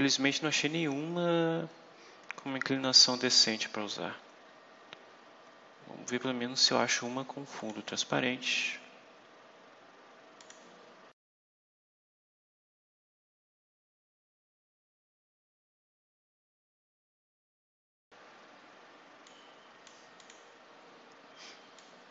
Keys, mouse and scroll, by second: 1.5-2.2 scroll down 4, 3.7-6.0 scroll up 8, 7.5 click, 10.3 click, 11.0-11.5 scroll down 4, 11.5 click, 12.0 scroll down 2, 12.4 click, 12.6 click, 12.6 scroll down 2, 13.1 click, 13.7 scroll down 2, 13.9 right click, 14.7 click, 14.8 click, 15.1 right click, 15.2 scroll up 2, 15.9 right click, 16.2 scroll down 2, 16.4-16.8 scroll up 4, 17.0 scroll down 2, 17.4 right click, 17.7 click, 17.8 click, 19.2 click, 20.1 click, 21.7 click.